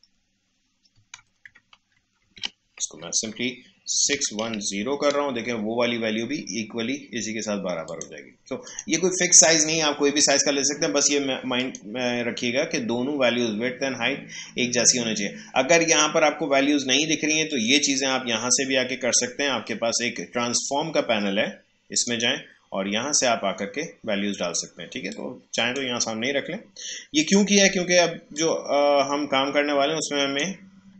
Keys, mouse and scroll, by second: 2.2 ctrl+a, 4.1-4.7 typing, 5.4 Return, 7.8 click, 11.5 click, 17.5 click, 20.2 ctrl+F10, 20.6 ctrl+shift+F11, 20.8 shift+F8, 20.9 ctrl+shift+F10, 22.0-24.4 drag, 25.1-30.9 drag.